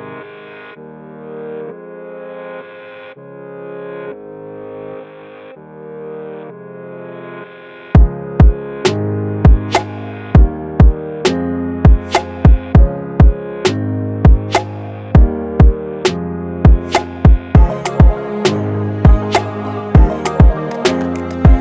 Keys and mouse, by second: 2.2 Right, 3.8-5.7 drag, 6.4 click, 7.1-9.9 alt+shift+drag, 9.9 Left, 10.5-12.4 drag, 13.0 ctrl+c, 14.0-21.4 alt+shift+drag.